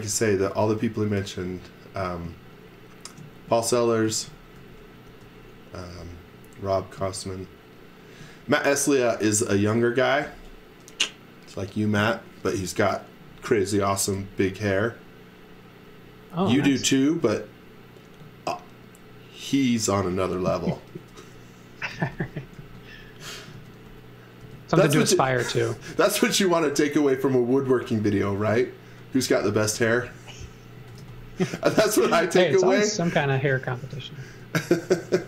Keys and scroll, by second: 4.1 z, 4.5 x, 5.0 v, 6.6 space, 7.6 space, 21.6-25.8 typing, 27.6 m, 28.6-34.3 typing.